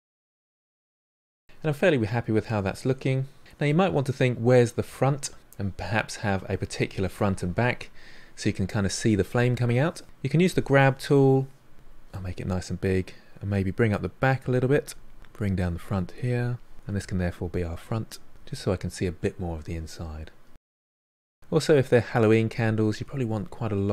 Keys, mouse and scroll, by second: 0.2 middle click, 0.4-1.5 drag, 1.5-3.1 ctrl+middle drag, 3.7-10.5 middle drag, 10.5 click, 11.3 f, 13.5-14.5 drag, 14.5 f, 14.8-16.7 drag, 16.7 middle click, 17.5 click, 18.0 middle click, 18.6 click, 19.1 middle click, 20.0 click, 20.9 middle click, 21.5-23.4 drag, 23.4 middle click, 23.8-23.9 drag.